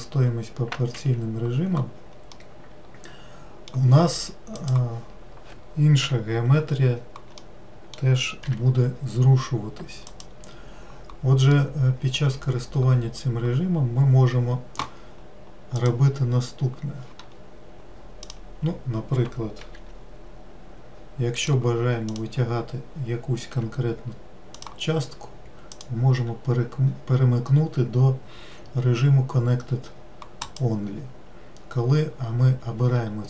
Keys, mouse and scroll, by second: 2.9-5.1 middle drag, 5.1 click, 6.5 l, 7.9-8.9 middle drag, 8.9 g, 12.0-15.0 middle drag, 16.3 click, 18.8 click, 20.2 g, 22.6-24.0 drag, 24.0 g, 26.2-29.3 drag.